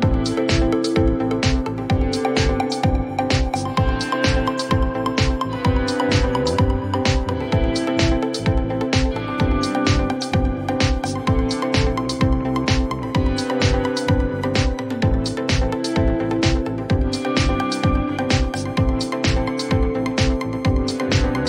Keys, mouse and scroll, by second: 0.6 shift+click, 3.9 click, 5.3 click, 8.2 p, 11.1 shift+r, 14.5 click, 15.3 click, 17.1 click, 17.4-18.4 typing, 18.8 Return, 20.3 click, 20.3 typing.